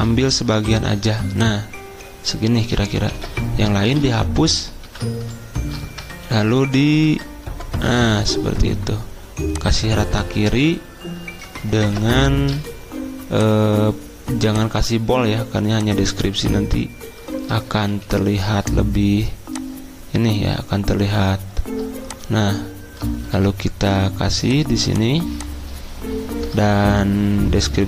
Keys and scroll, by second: 3.1 ctrl+a, 3.9 Delete, 4.8 ctrl+v, 6.1 ctrl+a, 6.7 alt+Up, 6.9 alt+Up, 7.1 alt+Up, 11.8 ctrl+t, 12.4 ctrl+t, 18.0 Escape, 23.3 d.